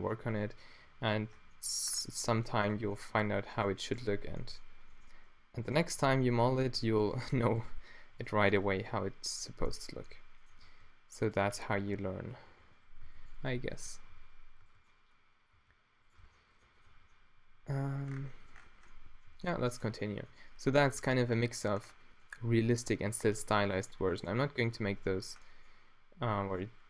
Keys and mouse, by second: 0.3 w, 0.9 q, 1.4 Tab, 2.7 Tab, 4.0 q, 6.1 d, 11.4 g, 11.6 Tab, 12.0 Tab, 12.5-15.6 typing, 16.2 Tab, 17.1 z, 19.3 a, 20.1 a, 24.8 Tab.